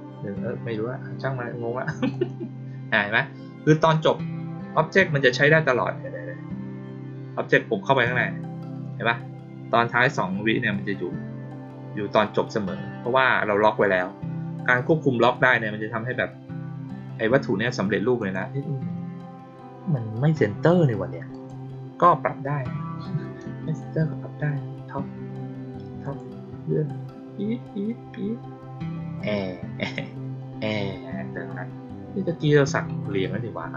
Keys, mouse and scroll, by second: 2.0 click, 7.8 click, 8.0 click, 18.1 click, 21.2 click, 25.9 click, 26.5-31.7 middle drag, 26.5-28.1 scroll down 2, 28.1-29.4 scroll down 1, 29.4-31.7 scroll down 1, 32.3 click.